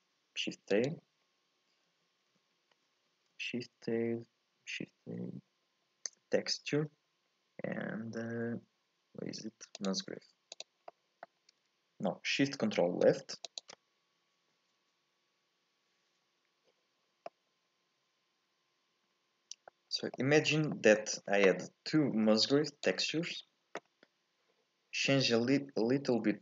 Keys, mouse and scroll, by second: 3.1 shift+a, 10.8 scroll up 1, 10.9 middle click, 11.4-13.1 scroll down 1, 13.1-13.5 scroll down 1, 13.5 ctrl+shift+click, 17.3-19.9 middle drag, 19.9 scroll up 2, 20.1 shift+middle click, 20.5 scroll down 1, 20.7-22.5 middle drag, 22.5 click, 23.3-23.8 scroll up 2, 23.8 scroll down 2, 24.0-26.3 scroll up 2, 26.3-26.4 scroll up 1.